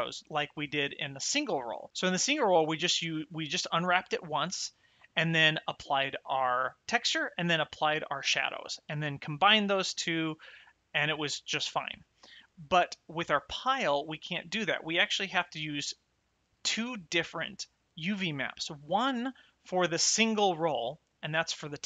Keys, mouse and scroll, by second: 18.8 click.